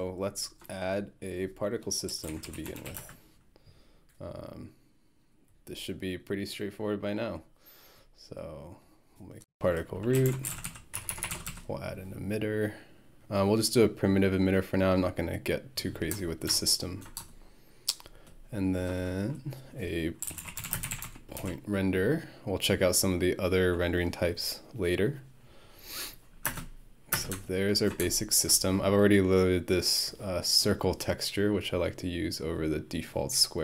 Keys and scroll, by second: 1.8-3.3 typing, 9.9-11.2 typing, 20.0-21.5 typing, 26.5 space, 27.1 space.